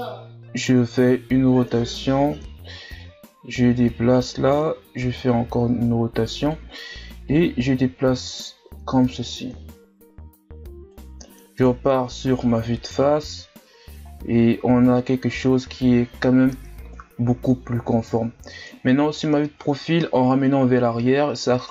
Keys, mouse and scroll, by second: 3.0-4.8 drag, 4.8 r, 7.3-11.7 drag, 11.7 KP_1, 12.3 z, 12.9 Tab, 14.0 ctrl+scroll down 1, 14.6-15.0 shift+scroll down 5, 15.0-16.5 scroll up 2, 16.5 KP_3, 17.8-19.6 ctrl+scroll up 7, 19.6 Tab, 20.4-21.7 ctrl+scroll up 2.